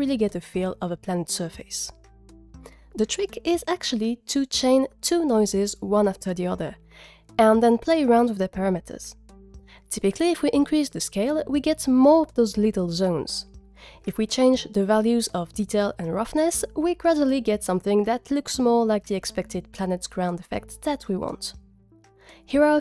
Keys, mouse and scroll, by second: 4.2 click, 4.4 click, 4.4 g, 4.6 click, 4.7 click, 4.8 shift+d, 4.9 x, 5.0 click, 5.6-7.1 drag, 9.5 click, 9.9 click, 11.9 click, 13.5 click, 14.5 click, 15.5 click, 16.5 click, 17.6 click, 18.8-19.8 drag.